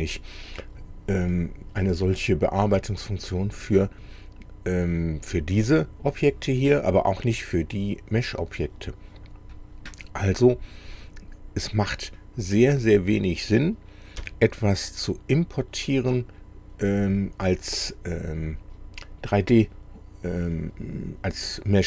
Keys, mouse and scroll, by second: 1.3 scroll up 2, 1.9-3.6 middle drag, 9.2 click, 12.9 click, 14.2 Delete.